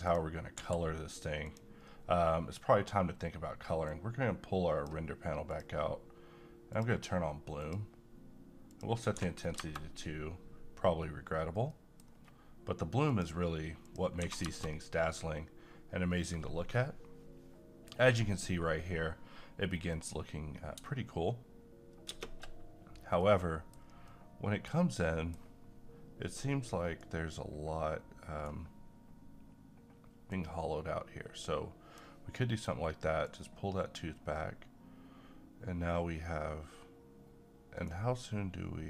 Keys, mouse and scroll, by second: 0.1 click, 0.6 g, 1.4 click, 3.8-5.5 drag, 9.1 2, 11.6 middle click, 12.0-13.0 scroll up 1, 13.0 click, 14.2 2, 22.1 shift+space, 23.2-25.0 middle drag, 27.0-30.3 right drag, 30.3-33.2 drag, 33.2-38.8 right drag.